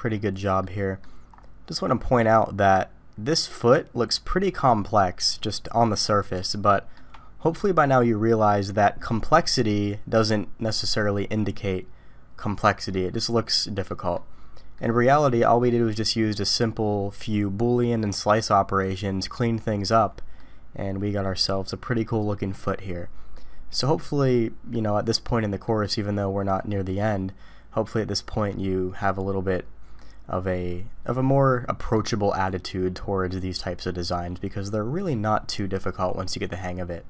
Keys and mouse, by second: 0.6 middle click, 2.2-3.7 middle drag, 6.5-6.9 shift+middle drag, 13.9 middle drag, 14.7-15.2 middle drag, 20.4-22.1 middle drag, 23.3-24.7 middle drag, 25.6 middle click, 30.0-31.9 middle drag.